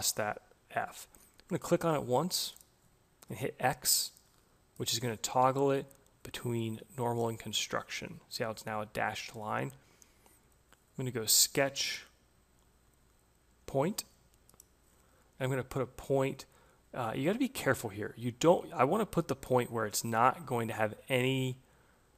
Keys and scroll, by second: 4.7 x.